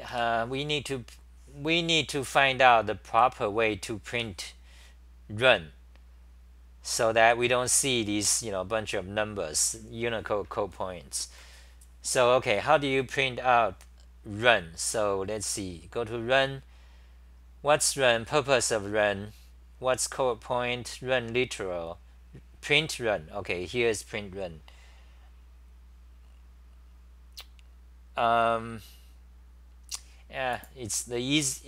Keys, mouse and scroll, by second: 1.1 Delete, 3.1 super+=, 3.1 ctrl+g, 3.1 w, 4.1 6, 7.4-11.4 scroll up 7, 18.0 Delete, 18.7 Delete, 22.7 BackSpace.